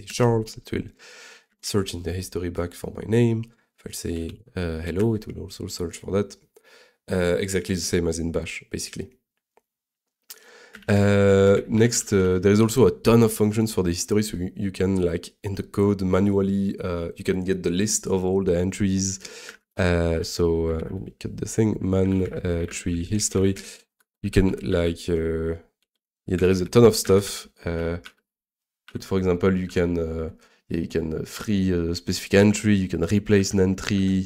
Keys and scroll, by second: 0.1 Return, 1.5 ctrl+r, 3.9-4.8 typing, 5.0 Return, 10.8 ctrl+d, 11.3-12.7 typing, 19.5 ctrl+a, 19.7 o, 20.1 m, 20.8 super+s.